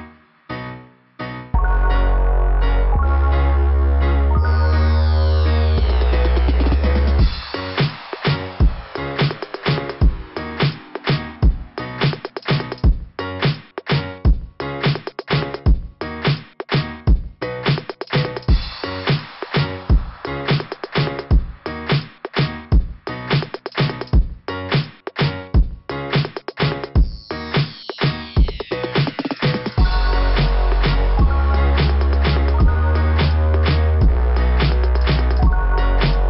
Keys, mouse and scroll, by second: 7.3 click, 7.6 click, 8.0 click, 8.3 click, 8.5 click, 8.9 click, 11.9-12.5 scroll up 5, 13.0 scroll up 1, 17.7 scroll down 2, 19.7 scroll down 2, 21.9 scroll down 2, 24.0-25.6 scroll up 14, 31.4 scroll down 2.